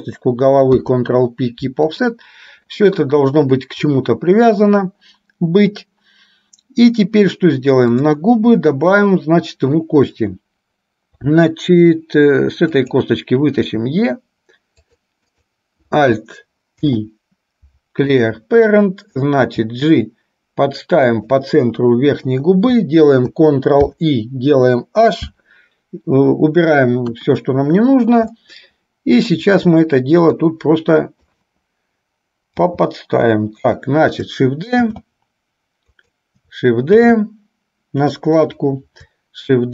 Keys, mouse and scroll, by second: 0.8 ctrl+p, 8.0 click, 12.8 click, 14.0 e, 15.5 click, 17.0 alt+p, 19.6 g, 24.0 ctrl+i, 25.5 h, 27.2 KP_1, 28.7 shift+middle click, 30.7 click, 32.6 g, 35.1 shift+d.